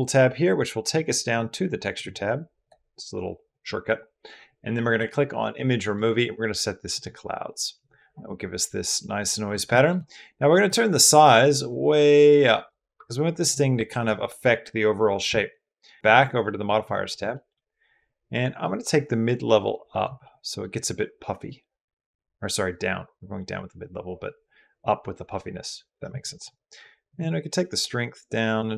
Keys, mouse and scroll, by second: 5.8-6.8 middle drag, 8.4 click, 8.4 right click, 9.5 drag, 9.5 right drag, 10.4-12.5 middle drag, 12.9 middle click, 13.5 middle drag, 16.3 middle drag, 17.1 shift+middle drag, 18.5-19.8 middle drag, 20.0 middle click, 21.4-25.8 middle drag, 26.1 middle drag, 27.0-28.7 shift+middle drag.